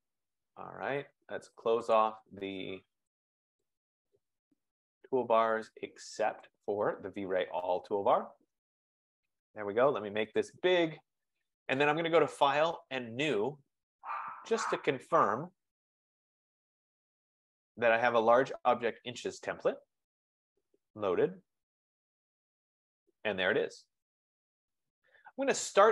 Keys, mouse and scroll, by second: 0.0 click, 2.1 click, 3.3 click, 4.2 click, 4.9 click, 5.8 click, 6.6 click, 8.7 click, 10.8 F15, 11.6 click, 13.0 click, 14.8 click, 17.2 click, 19.1 click, 20.3 double click.